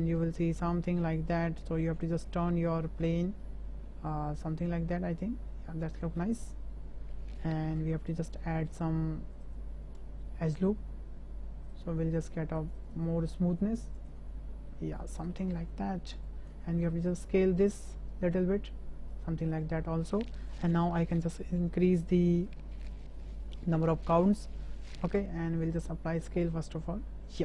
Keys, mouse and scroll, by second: 2.2 middle click, 3.2-6.0 drag, 6.2-7.1 middle drag, 7.8 Tab, 9.5 click, 10.4 click, 11.8 click, 12.6 click, 12.8 click, 12.9 click, 14.0 click, 14.2 Tab, 14.7-15.3 middle drag, 15.7 `, 16.8 s, 19.8 shift+middle drag, 21.2-24.9 drag, 25.7 ctrl+a.